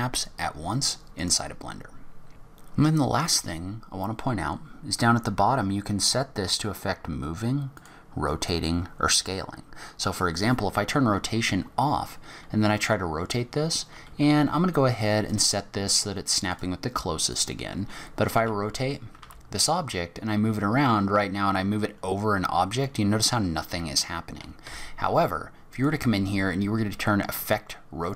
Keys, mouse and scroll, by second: 1.2 click, 11.2-11.7 scroll up 6, 12.6-13.2 scroll up 1, 15.3 click, 17.3 click, 17.7 scroll down 3, 18.4 r, 25.7 click.